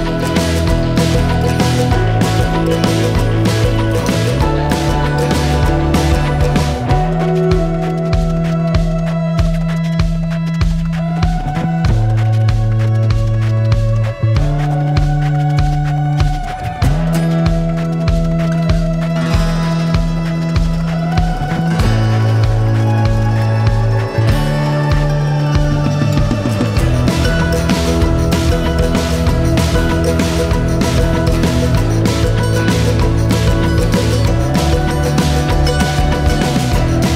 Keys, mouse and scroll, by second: 2.1 click, 3.8-5.0 scroll down 10, 6.0 shift+click, 6.6 shift+click, 8.2-8.5 scroll up 3, 9.5 scroll down 1, 10.2 s, 16.1-16.6 scroll down 1, 16.6 click, 17.3 shift+click, 21.8 middle click, 22.4 click, 22.5 click, 23.7 shift+click, 24.1 shift+click, 25.9-27.4 middle drag, 29.2 scroll down 3, 29.9 scroll down 1, 30.3 middle click, 31.0 scroll up 2, 32.1 scroll up 3, 34.7-36.4 middle drag, 36.8-37.1 middle drag.